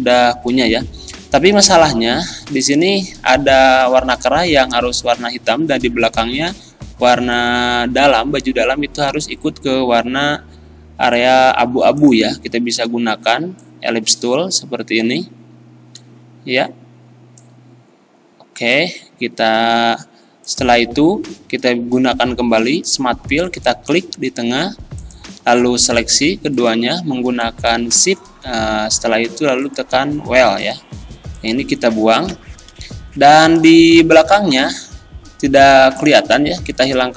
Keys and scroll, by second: 28.2 ctrl+z, 32.3 Delete.